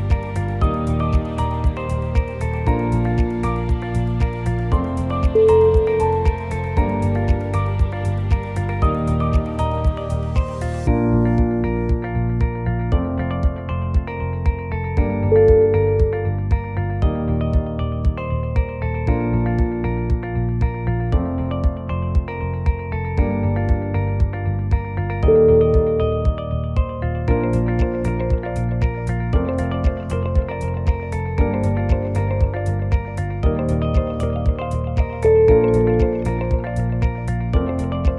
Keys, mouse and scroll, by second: 0.2 click, 0.6 g, 1.7 g, 2.6 scroll down 4, 3.1 click, 3.1 shift+click, 3.8 shift+click, 4.4 e, 7.0 click, 7.4 click, 7.8 g, 9.0 g, 10.0 g, 11.7 click, 12.1 g, 13.8 g, 14.9 g, 17.0 g, 18.0 g, 19.6 click, 20.1 g, 24.6 click, 25.0 g, 26.6 g, 28.2 g, 30.2 click, 30.6 g, 31.8 g, 33.8 scroll down 1, 34.0 scroll down 2, 35.0-35.4 scroll down 1, 35.4 click, 35.8 scroll down 1, 35.9 middle click, 36.6 middle click, 36.6-37.2 scroll up 2, 36.9 middle click, 37.6 2, 37.8-38.1 scroll up 2, 38.0 middle click.